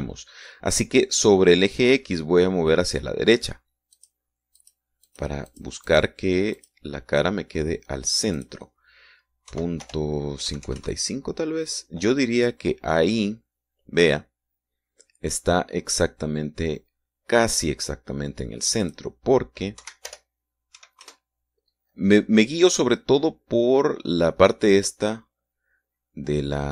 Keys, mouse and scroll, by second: 5.2 click, 5.8 click, 6.3 click, 6.7 click, 7.1 click, 7.8 click, 8.3-9.6 scroll up 2, 9.6 click, 9.9-10.7 scroll up 2, 10.7 Right, 10.7-11.6 scroll up 1, 11.1 BackSpace, 11.6-12.6 scroll up 1, 12.0 KP_Enter, 14.1-14.7 scroll up 2, 20.1 click, 21.0 Right, 21.3 BackSpace, 22.0 KP_6, 22.3 KP_Enter.